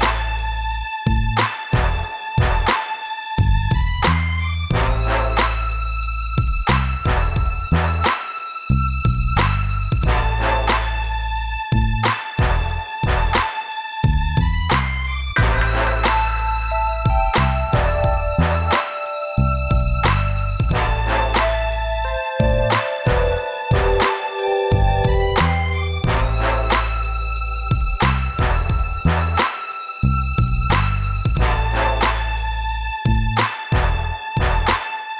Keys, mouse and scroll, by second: 0.7-1.0 scroll up 2, 1.4 click, 3.0 scroll up 2, 6.1 click, 7.7 click, 7.8 click, 8.8 click, 10.6 scroll down 2, 12.9 scroll up 1, 13.5 scroll up 1, 14.9 scroll down 2, 16.3 p, 17.5 middle click, 18.0 scroll down 2, 20.5 scroll up 2, 21.0 scroll up 1, 22.4 scroll up 2, 24.3 click, 25.3 click, 27.1 scroll up 1, 34.4 click, 34.4 click.